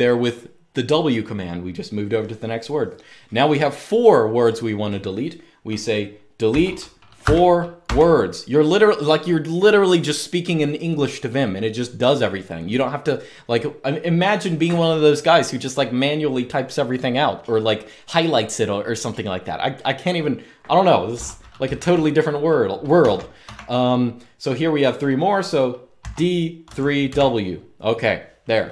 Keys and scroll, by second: 6.2-7.5 typing, 21.5 typing, 22.7-23.2 typing, 25.7-26.8 typing.